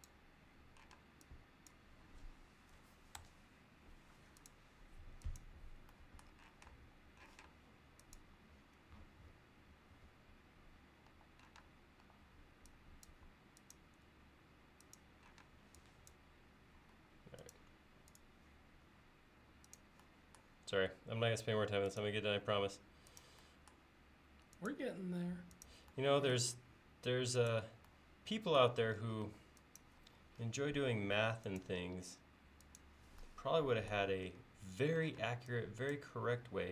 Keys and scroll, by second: 1.0 space, 3.2 BackSpace, 3.9 BackSpace, 7.4 m, 11.1-12.1 typing, 14.1 l, 15.5 space, 17.0 l, 18.9 l, 29.3 e, 34.7 l, 35.2 space.